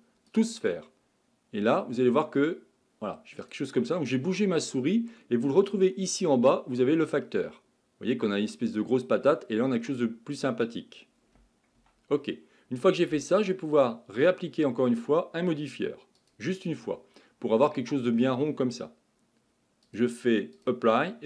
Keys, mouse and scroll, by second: 5.6-10.1 drag, 11.8 Tab, 14.2 click, 16.3 click, 19.9-21.2 drag.